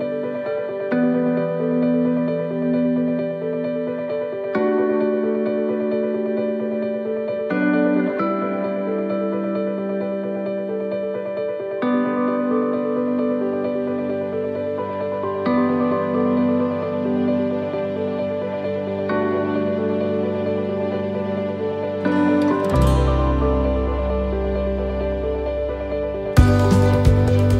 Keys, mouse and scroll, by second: 2.3 c, 22.6 x, 22.8 shift+middle click, 24.6 c.